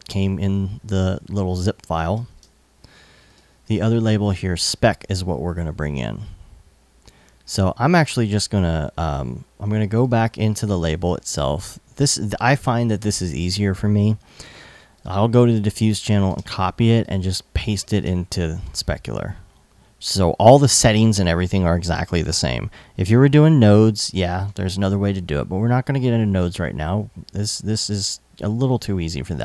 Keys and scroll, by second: 0.5 super+Tab, 1.7 super+s, 2.0 super+Tab, 15.9 super+c, 17.6 super+v.